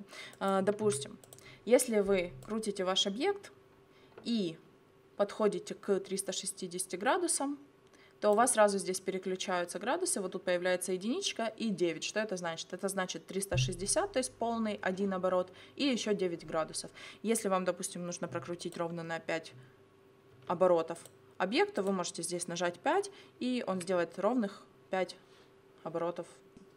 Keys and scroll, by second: 0.9 0, 20.4 0.